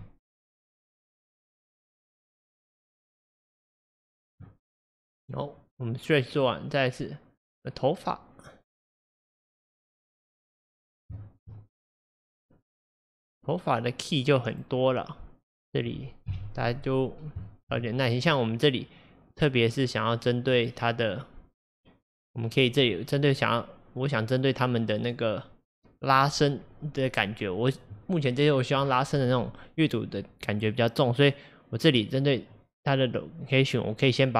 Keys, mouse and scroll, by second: 0.4-3.4 drag, 6.4 click, 7.5-10.4 drag, 10.8-11.1 scroll up 1, 11.2 shift+middle click, 11.5 scroll up 1, 12.3 click, 13.1 click, 14.6 click, 15.7-16.3 scroll down 1, 16.3 KP_3, 17.1-17.5 scroll up 1, 17.5 shift+middle click, 18.2 click, 20.6-22.4 drag, 24.2 click, 25.0 click.